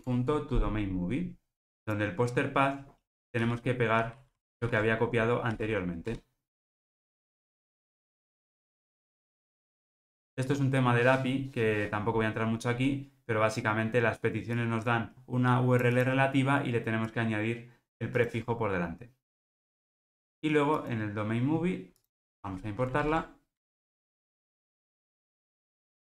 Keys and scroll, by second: 0.0 Tab, 3.5 super+v, 3.9 super+z, 4.6 shift+super+v, 10.3 alt+super+l, 23.1 alt+Return, 24.5 super+z, 25.4 alt+Return.